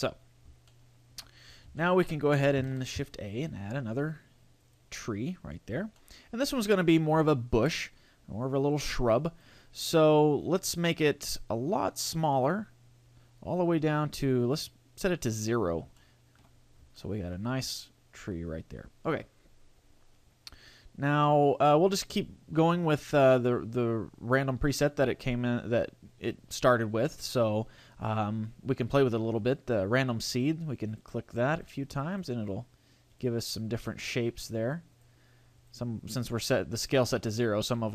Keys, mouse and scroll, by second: 0.7 shift+middle click, 1.3-1.8 scroll down 5, 1.8 shift+middle click, 2.7 shift+a, 5.6-6.0 scroll down 1, 6.0 shift+middle click, 6.9-7.3 scroll down 2, 7.3 shift+middle click, 8.8 click, 10.0 scroll up 1, 12.4 click, 15.6-16.2 scroll up 3, 16.0 shift+middle click, 16.4 shift+scroll down 1, 16.6-17.0 scroll up 2, 17.0 shift+middle click, 17.4-17.8 scroll up 2, 17.8 shift+middle click, 17.8 shift+scroll down 1, 20.6-22.4 scroll down 4, 30.2 click, 30.9 click, 31.6 click, 32.0 click, 32.4 click, 33.2 click, 33.8 click, 34.4 click, 35.0 click, 35.6 click.